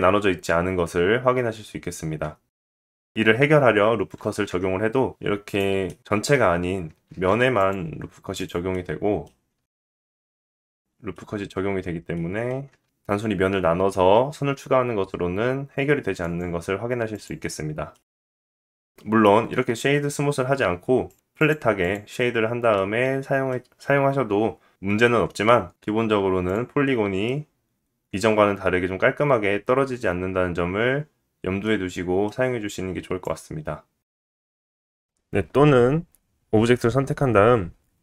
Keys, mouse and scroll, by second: 3.1 Tab, 3.1 click, 4.2 ctrl+r, 8.4-13.1 middle drag, 10.4 ctrl+r, 12.9 ctrl+r, 14.6 middle click, 15.6 middle click, 16.3 ctrl+r, 16.9 click, 17.2-18.6 middle drag, 18.6 click, 18.7-19.9 middle drag, 19.9-22.2 right drag, 21.6 middle click, 24.6 middle click, 25.7 middle click, 26.6 click, 26.9 Tab, 27.5 click, 27.9 middle click, 33.8 middle click.